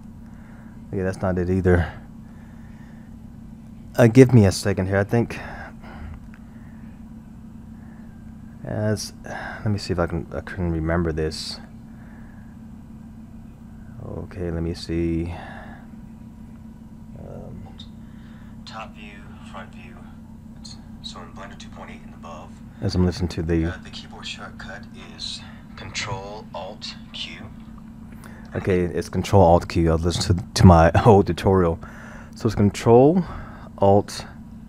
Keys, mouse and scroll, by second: 0.9 scroll.